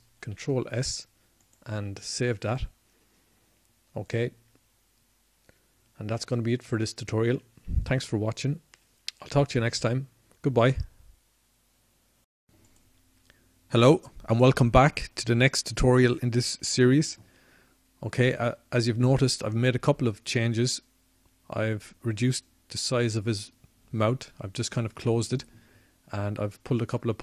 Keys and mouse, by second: 3.9 ctrl+s.